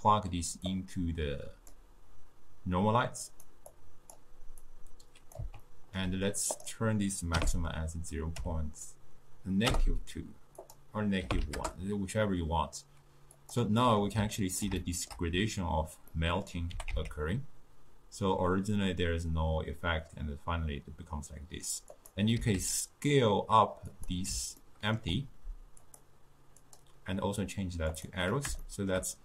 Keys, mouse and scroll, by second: 0.7 click, 3.4 click, 3.8-4.8 drag, 5.7 ctrl+middle click, 6.6-9.8 drag, 10.7-13.6 drag, 13.9-16.8 middle drag, 16.8 g, 22.5 s, 24.7-25.9 ctrl+middle drag, 25.9 click, 26.7-28.7 drag, 28.7-29.2 shift+middle drag.